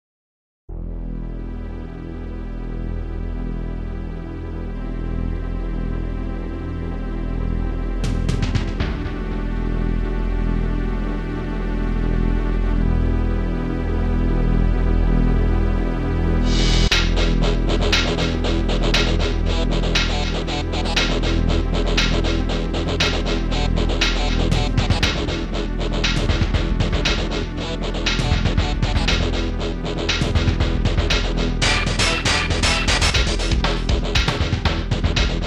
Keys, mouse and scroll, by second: 0.9 click, 1.3 click, 1.7 click, 1.9 click, 2.0 double click, 2.4 double click, 2.6 double click, 2.7 double click, 2.9 double click, 3.5 click, 8.6 click, 8.9 click, 9.4 click, 9.7 click, 13.9 ctrl+s, 14.2 click, 15.5-16.0 scroll down 1, 19.4 click, 19.9 click, 21.4 click, 26.3 click, 27.4 typing, 27.6 Return, 33.7 ctrl+s, 34.0 click.